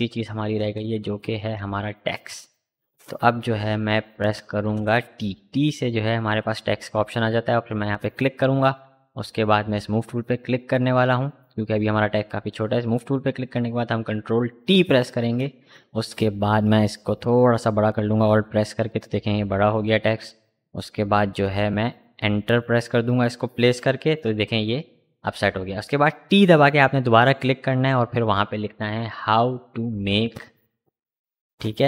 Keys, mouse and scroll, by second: 4.4 t, 6.6 click, 12.5 click, 14.2 ctrl+t, 14.8 ctrl+t, 16.0-24.5 alt+drag, 25.2 ctrl+a, 26.1-30.0 typing.